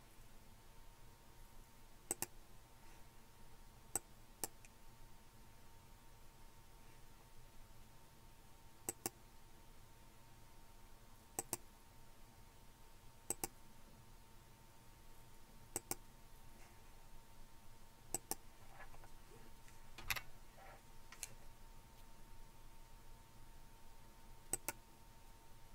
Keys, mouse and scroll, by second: 2.1 click, 4.0 click, 8.9-10.4 drag, 11.4-13.1 drag, 13.3-14.9 drag, 16.0 click, 18.1 click, 20.0 2, 24.5 click.